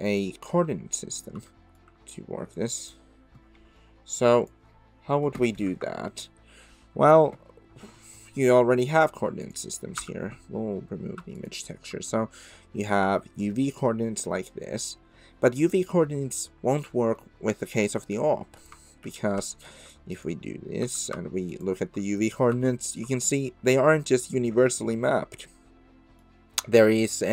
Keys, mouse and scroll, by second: 1.5 shift+middle click, 9.4 click, 10.0 x, 16.7 click, 17.2-17.6 middle drag, 19.0 ctrl+t, 19.8 click, 20.1 click, 20.8 x, 21.5 ctrl+shift+click, 22.6 shift+middle drag, 23.1-26.2 middle drag.